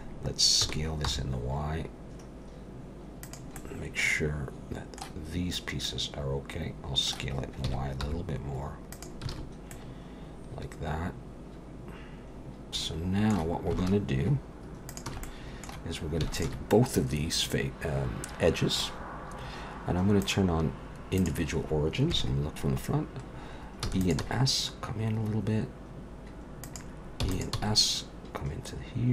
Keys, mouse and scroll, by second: 0.6-1.0 scroll up 2, 0.6 s, 3.6 middle click, 5.8 middle click, 7.6 s, 9.3 alt+a, 9.7 middle click, 13.1 middle click, 14.9 alt+shift+click, 15.2 middle click, 16.4 alt+shift+click, 16.7 middle click, 20.2 click, 22.1 KP_1, 23.8 e, 24.2 s, 27.2 e, 27.5 s.